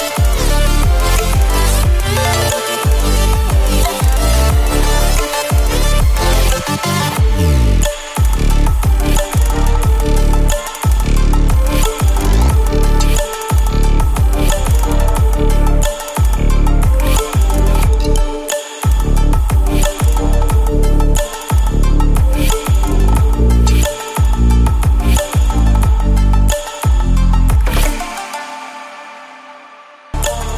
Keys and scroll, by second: 0.6 ctrl+space, 0.8 [, 1.6 ctrl+space, 2.1 space, 3.1 space, 4.4 space, 5.0 space, 6.1 space, 6.9 space, 7.4 ctrl+space, 7.6 ctrl+space, 8.5 ctrl+space, 9.0 space, 9.3 space, 10.0 ctrl+space, 11.7 ctrl+space, 12.8 ctrl+space, 13.9 ctrl+space, 15.0 space, 16.2 ctrl+space, 16.7 space, 17.8 ], 18.4 space, 19.4 ctrl+z, 19.7 ], 19.8 [, 21.0-23.6 typing, 25.5 space, 26.5 space, 27.1 space, 27.9 ctrl+space, 29.0 ctrl+space.